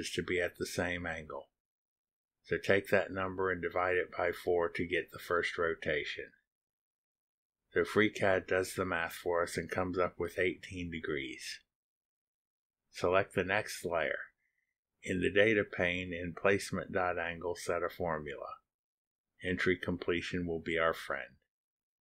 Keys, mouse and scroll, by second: 13.7 click, 15.8 click, 16.4-17.3 typing, 18.0 Down, 19.8-21.7 typing.